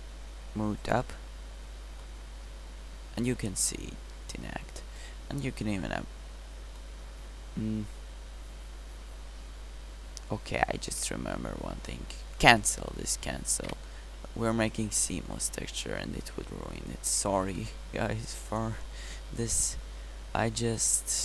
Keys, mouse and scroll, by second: 2.2 middle click, 2.9 middle drag, 3.4-4.9 middle drag, 14.5-17.8 middle drag, 20.2 middle click, 20.6-21.0 middle drag.